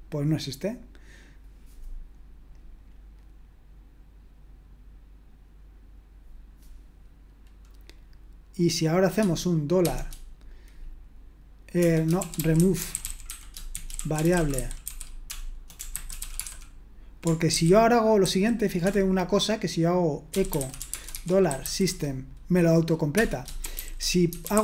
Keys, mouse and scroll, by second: 9.8 typing, 11.8-16.9 typing, 17.5 ctrl+w, 17.5 ctrl+q, 18.2 ctrl+q, 18.8-22.1 typing, 23.1 Return, 23.4-24.6 typing.